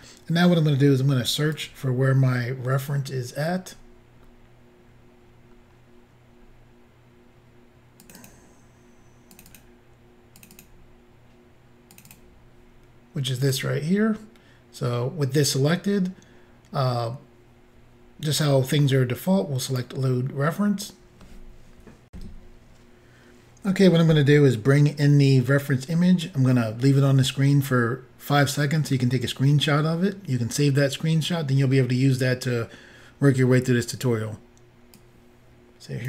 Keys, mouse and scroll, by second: 1.5 click, 3.3-3.8 scroll down 4, 4.8 scroll down 5, 6.5 scroll up 1, 8.1 click, 8.2 double click, 9.3 double click, 9.5 double click, 9.6 double click, 10.4 double click, 10.5 double click, 10.6 double click, 11.9 double click, 12.1 double click, 12.1 double click, 13.4 double click, 19.7 click, 22.1 Insert, 34.9 click.